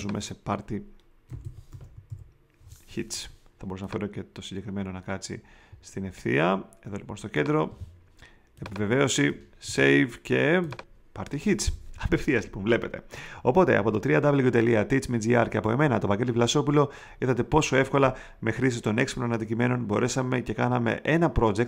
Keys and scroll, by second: 1.2 p, 9.6 super+s.